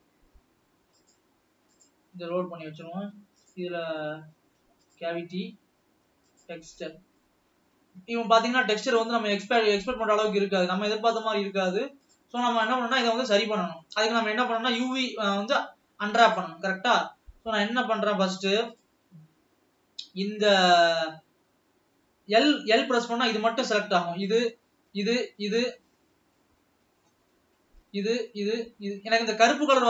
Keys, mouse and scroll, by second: 1.2-5.1 drag, 7.3-8.4 middle drag, 8.4 scroll down 1, 8.9-10.9 middle drag, 10.9 scroll up 3, 11.5-13.3 middle drag, 13.3 scroll down 2, 13.8-16.4 middle drag, 16.4 click, 16.6 Tab, 16.9-17.4 scroll up 3, 17.7 alt+a, 20.9 alt+a, 22.2 l, 23.0-24.7 scroll down 1, 24.7 l, 25.9-26.6 scroll up 3, 26.6 middle click, 27.4 scroll up 2, 28.2 l.